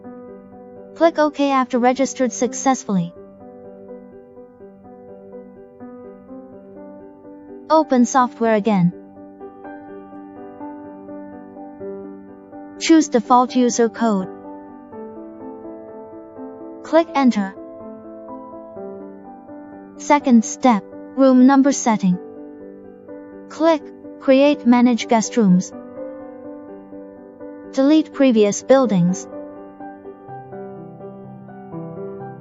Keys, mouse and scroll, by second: 0.0 click, 4.7 click, 8.8 right click, 10.2 click, 10.4 right click, 11.7 click, 14.7 click, 17.4 click, 19.2 click, 27.0 click, 30.7 click.